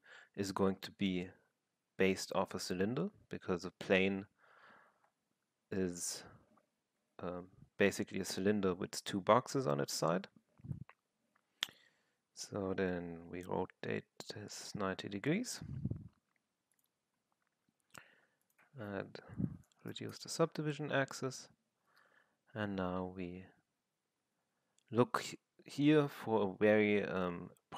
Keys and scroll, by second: 5.7 j, 7.0 w, 11.7 e, 13.4-15.6 j, 19.4 8, 19.9 Return, 22.7 f.